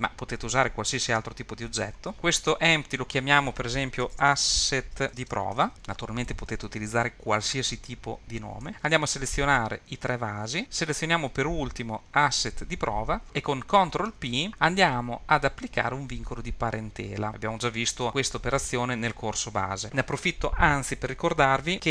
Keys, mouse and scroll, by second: 3.2 click, 3.5 s, 3.6 s, 9.1 click, 10.0 shift+click, 10.6 click, 12.2 shift+click, 14.1 ctrl+p.